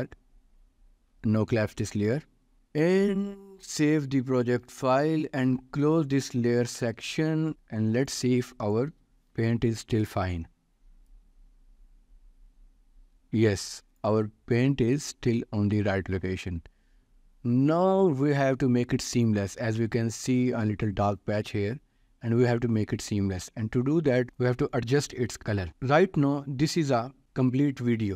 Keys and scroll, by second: 4.2 ctrl+s, 9.3 ctrl+s.